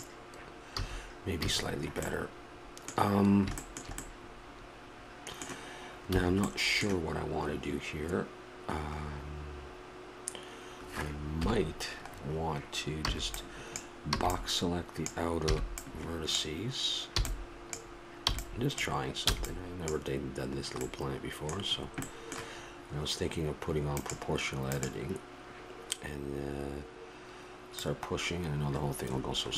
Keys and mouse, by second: 0.8 a, 1.4 a, 2.2-6.1 middle drag, 6.1 a, 6.5-9.0 middle drag, 11.4 KP_7, 13.1-20.9 b, 20.9 middle click, 21.3-22.5 middle drag, 23.9-25.9 drag, 27.7-29.5 drag.